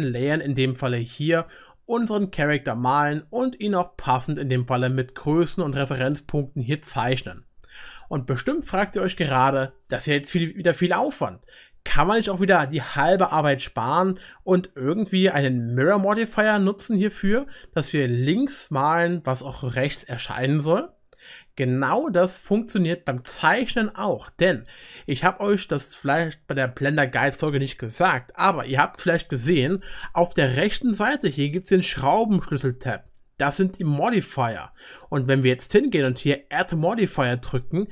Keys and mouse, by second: 6.6-12.6 drag, 6.6-12.6 middle drag, 6.6-12.6 right drag, 18.0-33.4 middle drag, 23.4-33.4 drag, 23.4-33.4 right drag, 35.0-36.9 drag.